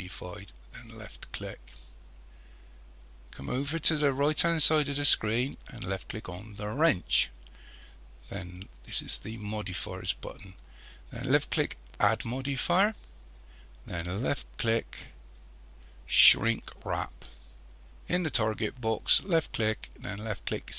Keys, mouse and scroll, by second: 6.7 click, 12.0 click, 19.3 click.